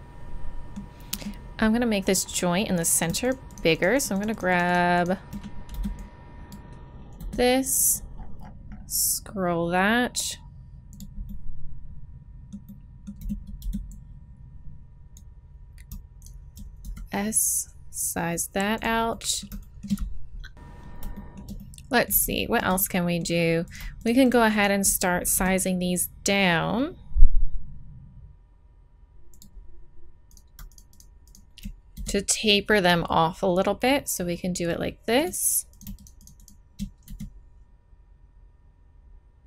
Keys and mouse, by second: 2.9-6.8 right drag, 5.7 b, 7.0 middle click, 7.1 s, 11.2-13.1 middle drag, 13.1 a, 13.6 b, 16.2 right click, 16.8 s, 16.9-18.1 drag, 19.1 click, 23.6 right click, 24.4 middle click, 25.0-26.4 right drag, 25.3 s, 30.3-32.8 right drag, 31.9 s, 32.8 click, 35.7-38.3 right drag, 37.0 s.